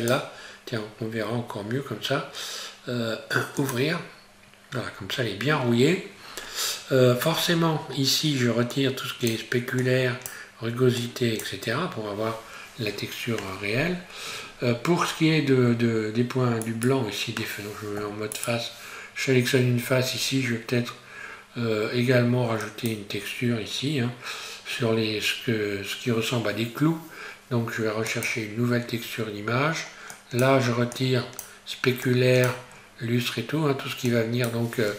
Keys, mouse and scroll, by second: 4.9 scroll down 1, 8.7 click, 12.2 scroll up 1, 14.0-14.7 scroll down 1, 14.7 scroll up 1, 16.6 right click, 18.0 3, 18.3 right click, 19.7-20.0 scroll down 1, 20.0-20.4 scroll up 1, 20.4-21.2 scroll down 1, 21.2-22.6 scroll up 1, 22.6 click, 29.4-30.2 scroll down 1, 30.2 click, 32.7-34.1 scroll down 1, 34.1 click.